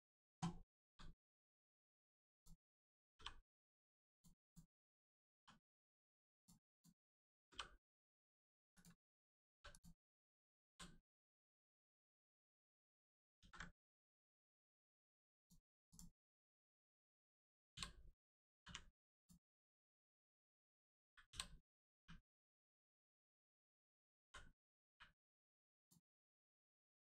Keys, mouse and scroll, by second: 0.8 g, 1.1 middle click, 1.9 ctrl+click, 2.3 click, 3.1 g, 3.5 middle click, 4.1 ctrl+click, 4.4 click, 5.3 g, 5.7 middle click, 6.3 ctrl+click, 6.7 click, 7.7 middle click, 8.4 ctrl+click, 8.7 click, 8.7 click, 9.1-9.5 scroll down 1, 9.7 click, 10.1 scroll down 1, 10.7 l, 11.1 right click, 11.9 click, 13.3 ctrl+z, 14.1 right click, 15.3 click, 16.2 scroll up 1, 16.7 click, 18.6 l, 18.6 u, 19.1 click, 19.5 shift+middle click, 20.3 click, 21.3 l, 21.9 u, 23.2 click, 24.2 l, 25.8 click.